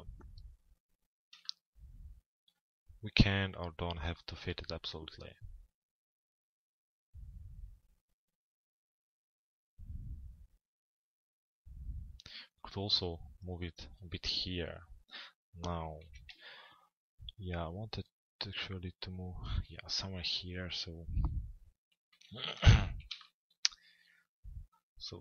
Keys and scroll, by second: 15.6 f, 16.3 z, 19.9 p, 22.1 z, 22.5 p.